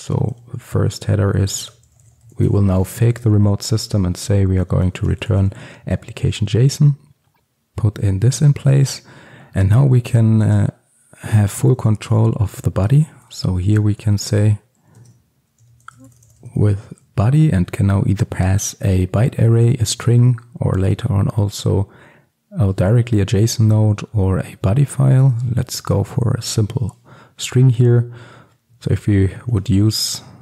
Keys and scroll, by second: 7.3 ctrl+alt+super+l, 13.1 Tab, 15.1 Tab, 25.9 Return.